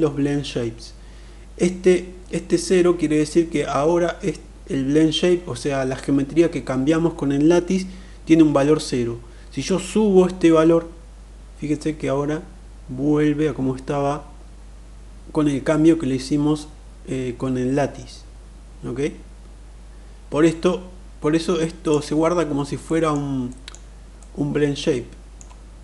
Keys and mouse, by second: 9.4-21.6 drag, 22.5-22.9 middle drag, 23.0 middle click, 23.9-25.1 middle drag, 25.5-25.8 middle drag.